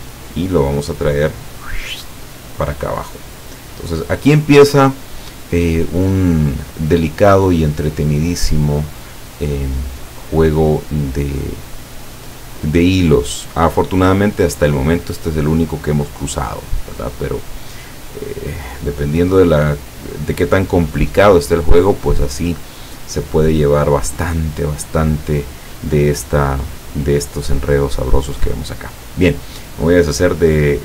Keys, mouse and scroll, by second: 1.1-3.4 drag, 4.3-9.2 drag, 10.1-10.7 drag, 18.3-20.3 drag, 26.2-26.5 scroll down 1, 27.9-28.8 scroll up 4.